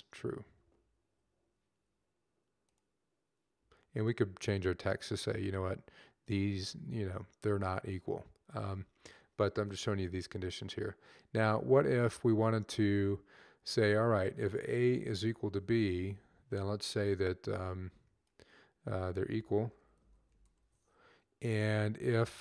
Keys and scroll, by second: 15.0 =, 15.7 Down, 19.2-20.8 typing, 21.2 Down, 21.6 Left, 22.2 Left.